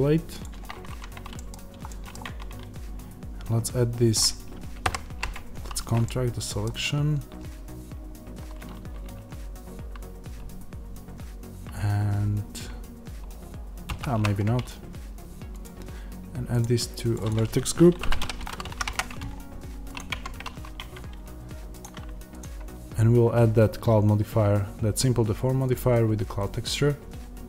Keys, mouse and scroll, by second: 0.8 Tab, 1.3 middle click, 2.2 Tab, 6.0 middle click, 6.7-13.7 scroll, 13.8 ctrl+z, 16.5-20.0 drag, 18.8 Return, 20.0 Tab, 25.7-27.4 drag.